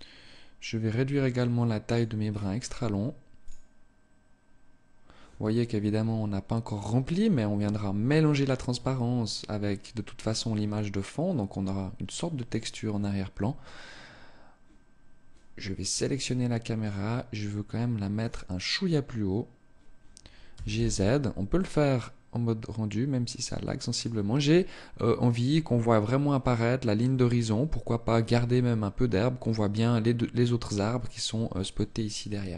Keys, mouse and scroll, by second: 0.5-1.3 scroll up 4, 1.3 click, 1.7 scroll down 3, 2.8 click, 15.4-16.2 scroll up 1, 16.2 click, 17.6 right click, 19.9 g, 23.5 click.